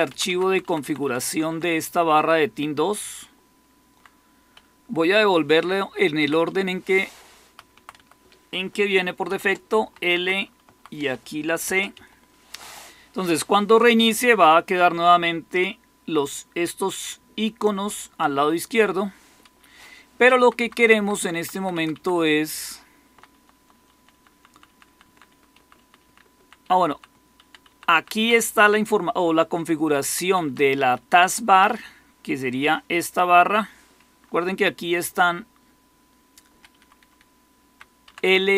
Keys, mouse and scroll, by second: 0.0 Down, 0.4 Down, 0.6 Down, 0.9 Down, 1.2 Down, 1.4-3.9 Down, 1.9-2.6 typing, 3.9-5.5 typing, 6.4 Right, 6.6-7.8 typing, 7.9 Right, 8.9-12.4 typing, 20.0 Down, 20.3 Down, 20.5 Down, 20.7 Down, 20.9 Down, 21.2 Down, 21.4 Down, 21.9 Down, 22.1-23.5 Down, 23.6 Down, 24.0 Down, 24.2 Down, 24.6 Down, 24.8 Down, 25.7 Down, 25.9 Down, 26.5 Down, 26.8 Down, 27.6 Down, 27.8 Down, 28.1 Down, 30.4 Down, 30.9 Up, 31.1 Up, 34.3 Up, 34.8 Up, 34.9-36.4 Up, 36.7 Up, 36.7 Up, 37.1 Up, 37.6 Up, 37.6 Up, 38.0 Down, 38.2 Down.